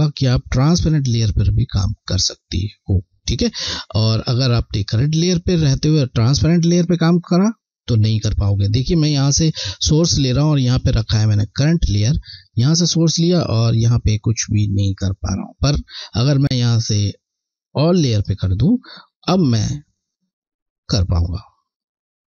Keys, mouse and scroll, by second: 4.1 click, 12.0 click, 12.5 alt+click, 13.7 click, 19.2 alt+click, 20.6 click.